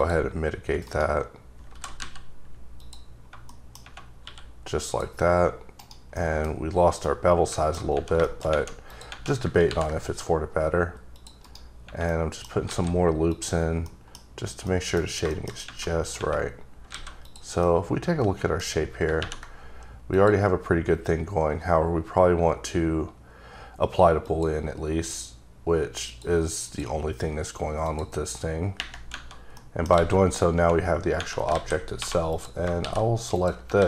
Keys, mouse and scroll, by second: 0.8 right click, 1.7 g, 2.0 z, 2.8 click, 3.1-3.5 scroll down 2, 3.5 middle click, 4.1 scroll up 1, 4.2 q, 4.8 click, 5.8 right click, 6.0 scroll up 1, 6.1 middle click, 6.9 scroll down 1, 7.0 middle click, 8.2 shift+middle click, 8.5-8.8 scroll up 1, 8.8 click, 9.6 ctrl+r, 10.1-11.2 scroll up 4, 11.2 click, 11.4 right click, 12.1 middle click, 12.6 alt+a, 13.3 click, 13.8 middle click, 14.7 middle click, 15.0 scroll down 1, 15.3 shift+middle click, 15.8 middle click, 16.9 alt+a, 17.2 click, 17.6 middle click, 20.1 click, 24.2 click, 24.3 click, 26.6 click, 27.8 click, 29.5 middle click, 30.0 alt+a, 31.5-32.8 typing, 32.3 click, 33.3 click, 33.8 alt+a.